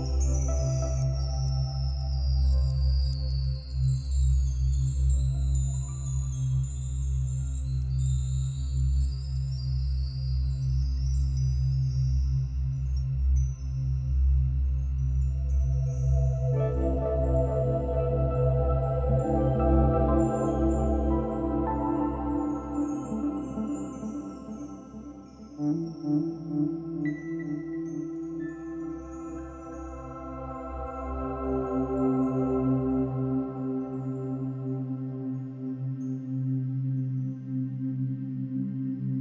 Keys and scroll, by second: 5.1 space, 25.7 [.